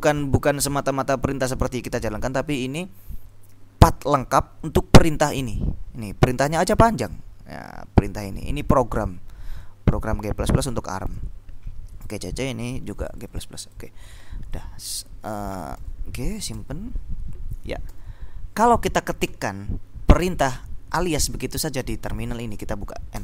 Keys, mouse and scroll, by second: 3.4-6.1 drag, 6.5-9.3 drag, 9.7-11.8 drag, 12.1 click, 13.2-14.4 drag, 14.5 click, 15.6-17.1 typing, 18.0 ctrl+l, 20.7-22.0 typing.